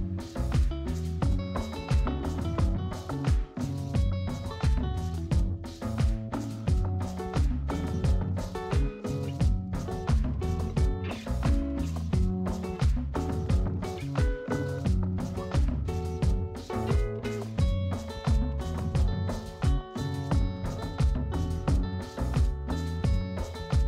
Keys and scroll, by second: 18.3 space, 22.2 space.